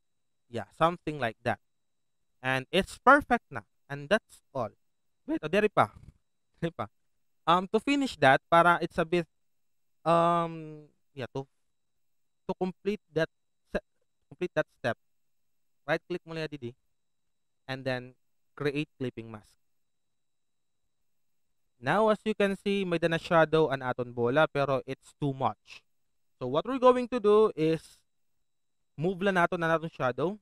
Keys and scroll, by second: 3.0 alt+v.